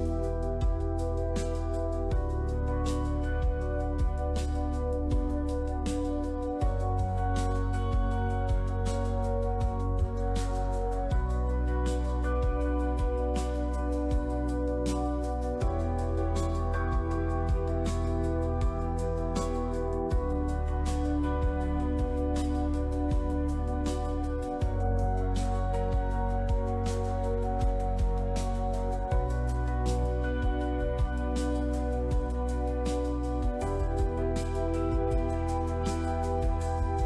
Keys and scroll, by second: 11.8 ctrl+r, 12.2 Tab, 22.8 shift+i, 23.2 Return, 25.9 shift+i, 26.3 Return, 27.0 Delete.